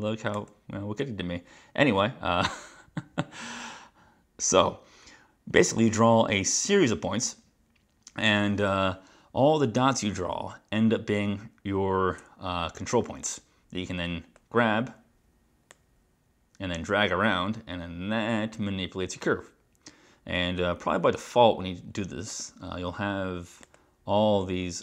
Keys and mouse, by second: 0.5 right click, 15.8 click, 22.4 click, 23.7 click.